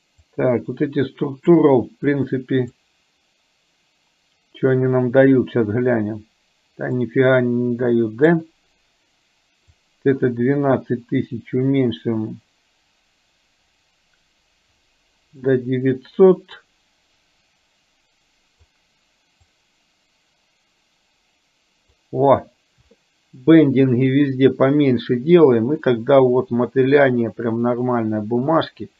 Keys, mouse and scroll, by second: 0.3-1.6 drag, 2.1 click, 7.1-8.5 drag, 9.8-15.5 drag, 16.7-18.8 drag, 19.5-22.1 drag, 26.0-28.9 middle drag.